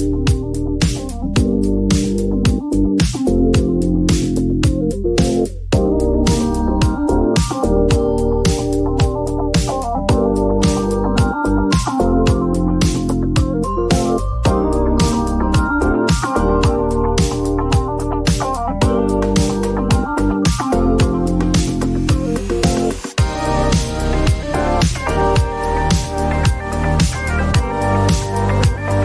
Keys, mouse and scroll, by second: 0.2-1.2 typing, 3.0 click, 3.2 click, 7.6 click, 9.4 click, 10.1 typing, 11.5-12.2 typing, 17.6 click, 22.4 click, 24.7 click, 27.1 click, 28.6 1.